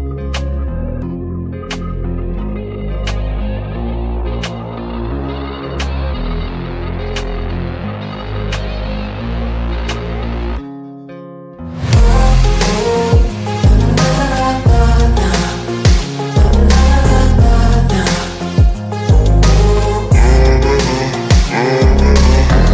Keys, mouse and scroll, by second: 5.0-6.8 drag, 8.9 ctrl+g, 9.2 click, 9.5 click, 14.9 shift+click, 15.9 Escape, 18.6 shift+click, 19.4 Escape, 20.7 click.